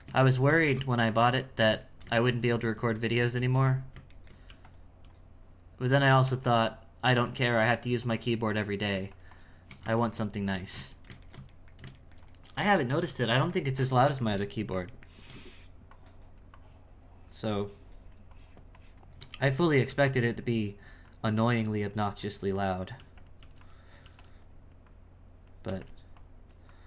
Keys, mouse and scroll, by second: 4.2 ctrl+middle click, 4.4 f, 5.1-6.2 drag, 6.2 f, 7.0 f, 7.5-10.1 drag, 10.1-15.9 ctrl+shift+middle drag, 15.9-19.9 shift+drag, 20.5-22.9 drag, 23.4 f, 24.4-25.7 drag, 25.7 f, 26.2-26.8 drag.